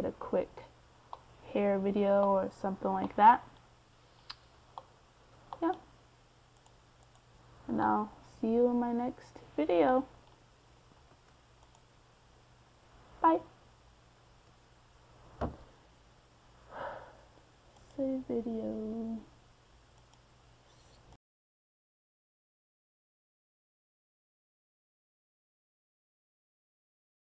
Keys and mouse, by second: 10.6-11.8 middle drag, 13.4-15.0 middle drag, 15.0 middle click, 15.6-16.7 middle drag, 16.8 middle click, 20.0 middle click, 20.4-21.5 middle drag, 21.5 a, 23.4 ctrl+s.